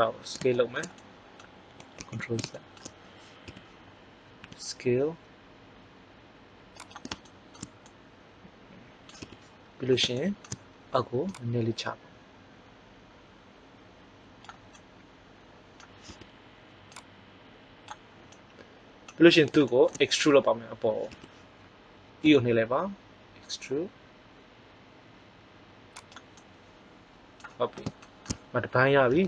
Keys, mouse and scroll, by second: 0.5-2.0 middle drag, 2.0 ctrl+z, 3.4 KP_1, 4.3 s, 9.2 KP_1, 11.2-13.2 drag, 16.0 KP_1, 21.0 KP_1, 22.1 e, 26.4 middle click.